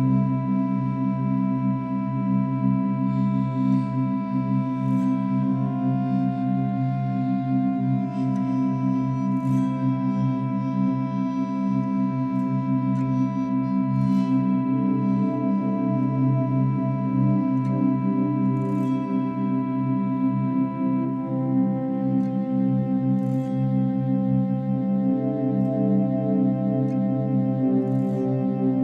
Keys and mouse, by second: 1.0 click, 3.0-4.7 drag, 6.3-7.4 drag, 7.7-11.0 alt+drag, 15.7 click, 17.5 drag, 18.7 click, 23.2-23.5 alt+drag, 25.6-26.1 alt+drag, 26.9-28.8 drag.